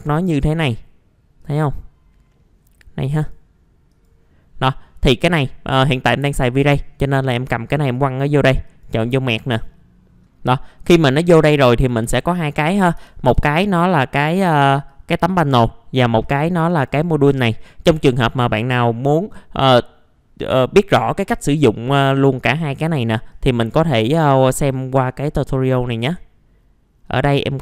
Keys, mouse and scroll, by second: 2.3 middle click, 3.1-4.9 drag, 10.3-11.4 scroll up 1, 11.4 click, 12.1 alt+middle click, 13.0 alt+f, 13.3 alt+z, 13.5 scroll down 1, 13.9-14.9 scroll up 1, 14.9 click, 17.6 middle click, 23.3 click, 27.0-27.4 scroll down 1.